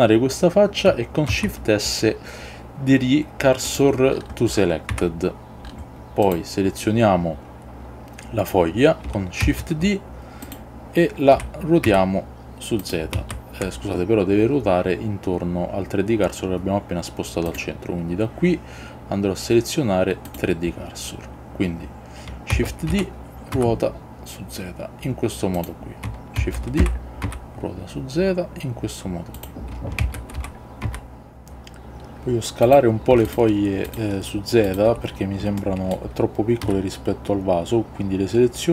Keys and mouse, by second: 1.5 shift+s, 5.0 Tab, 9.5 shift+d, 10.5 click, 11.5 r, 12.0 z, 12.9 click, 13.3 ctrl+z, 17.7-20.5 drag, 22.7 shift+d, 23.0 r, 23.7 z, 25.7 click, 26.5 shift+d, 26.9 r, 27.3 z, 29.5 click, 30.1 shift+d, 30.5 r, 30.9 z, 33.3 shift+drag, 33.9 shift+drag, 34.7 shift+click, 35.7-36.1 shift+middle drag, 36.7 s.